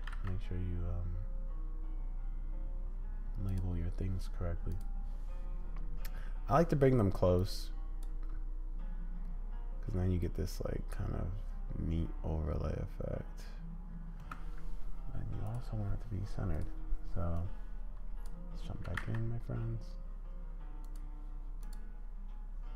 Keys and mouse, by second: 0.0 g, 4.7 click, 7.5-8.0 drag, 8.1 space, 14.2 space, 15.4 click, 16.5 click, 17.4-18.4 drag, 18.9 g, 21.6 click.